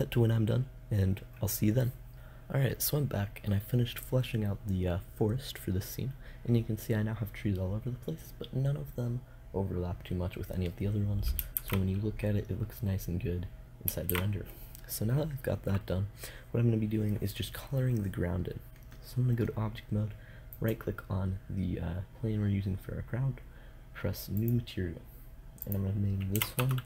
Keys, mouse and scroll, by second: 11.0 shift+z, 13.5 shift+z, 20.0-26.8 drag.